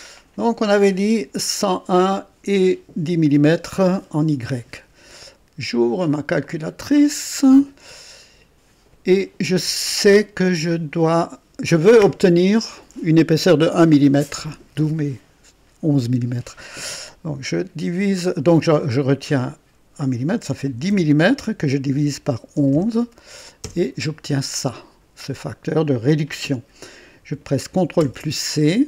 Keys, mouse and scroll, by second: 6.4 click, 20.6 KP_1, 20.8 KP_0, 21.8 KP_Divide, 22.5-23.6 typing, 23.6 KP_Enter, 28.0 ctrl+c.